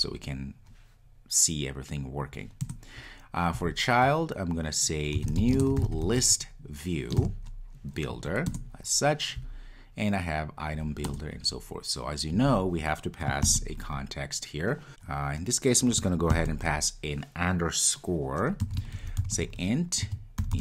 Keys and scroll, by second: 8.5 Return.